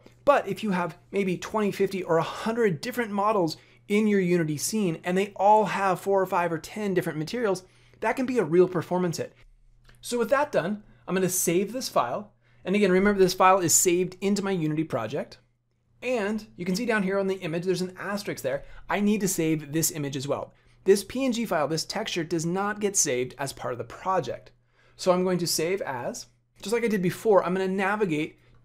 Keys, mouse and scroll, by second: 11.7 click, 24.0 click.